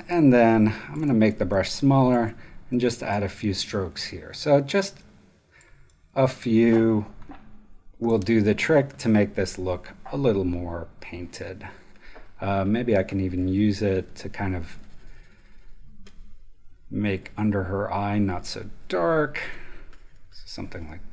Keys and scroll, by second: 0.8 super+space, 1.3 ctrl+alt+super+space.